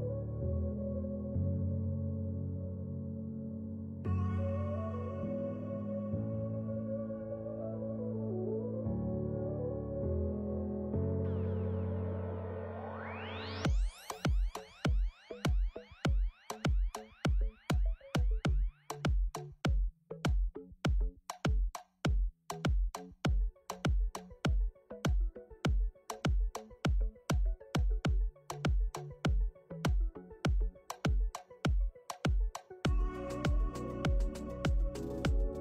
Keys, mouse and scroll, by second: 0.6 u, 2.0 click, 2.0 a, 2.0 r, 3.9 scroll down 1, 3.9 s, 6.1 g, 13.5 g, 14.9 g, 15.6 g, 16.4 s, 18.4 click, 19.8 Tab, 21.2 click, 21.4 ctrl+s, 22.7 middle click, 23.3-24.4 scroll up 2, 24.4 middle click, 26.8 click, 28.5 click.